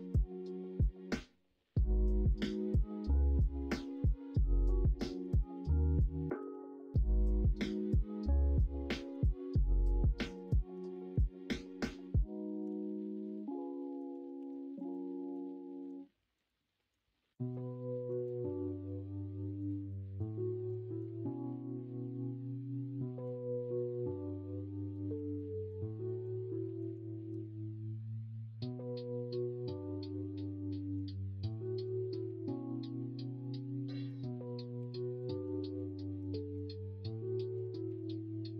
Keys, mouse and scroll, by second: 0.3-2.5 drag, 2.5 scroll up 1, 2.5 middle click, 3.6 middle click, 3.9-4.3 scroll down 1, 4.5-5.1 scroll up 2, 4.9 middle click, 5.1 scroll down 1, 5.4 shift+middle click, 5.4 scroll up 1, 6.3 ctrl+r, 7.6 2, 8.9 middle click, 10.9 middle click, 13.7 middle click, 14.3 ctrl+r, 15.2 middle click, 18.0 s, 19.8 middle click, 20.6 middle click, 20.9 scroll down 1, 21.1 scroll up 1, 21.2-23.2 middle drag, 23.5 scroll up 1, 24.6 scroll up 1, 24.7 middle click, 25.2 ctrl+z, 25.4 middle click, 26.0 middle click, 26.6 middle click, 27.3 ctrl+b, 31.5 middle click, 32.0 shift+middle click, 33.4 middle click, 34.7 2, 37.6 ctrl+z.